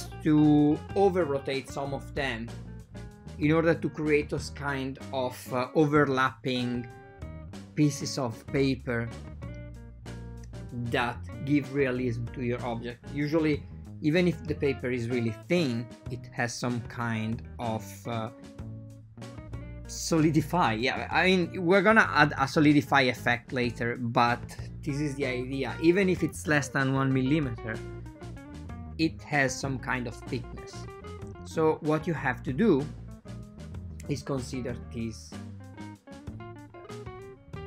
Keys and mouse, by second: 3.8 click, 4.4 right click, 4.6 shift+click, 5.7 c, 7.6 click, 8.1 shift+click, 9.2 r, 17.1 click, 17.5 alt+shift+click, 18.6 alt+shift+click, 19.0 shift+click, 20.0 r, 23.7 ctrl+middle click, 24.4 click, 24.8 click, 25.6 alt+shift+click, 27.4 r, 36.2 click.